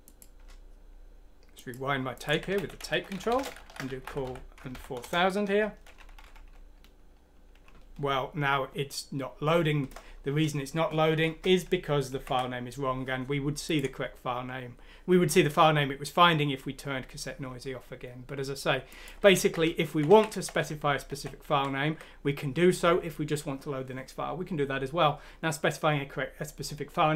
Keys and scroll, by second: 2.5-4.7 typing, 5.0 Return, 6.2 F4, 11.1 F3, 12.2 ctrl+F9, 19.4 ctrl+z, 20.2 ctrl+z, 21.1-22.8 ctrl+z.